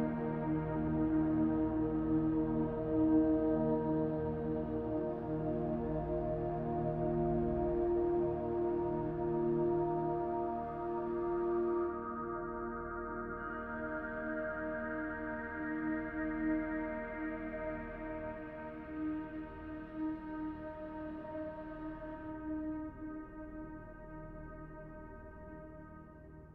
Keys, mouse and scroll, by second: 1.3 f, 3.1 g, 6.9 shift+d, 9.4 r, 11.4 g, 14.2 s, 15.7 g, 18.9 shift+d, 20.1 click, 23.1 r, 24.0 g.